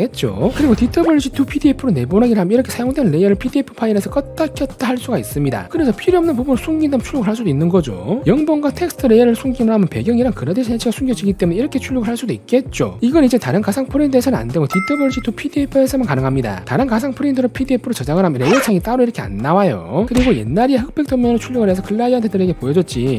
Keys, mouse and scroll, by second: 3.2 click, 4.7 click, 12.4 click, 13.4 click, 15.7 click, 20.6 click.